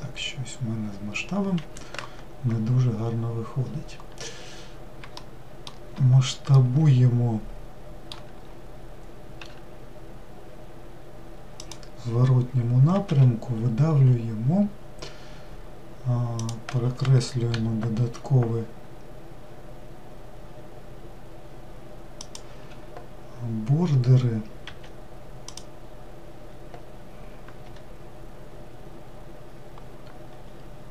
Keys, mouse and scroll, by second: 2.7-3.3 scroll up 2, 3.3-3.6 scroll down 2, 4.3 scroll up 1, 4.9-9.2 shift+middle drag, 9.2 s, 27.3 y, 30.3-30.9 scroll up 1.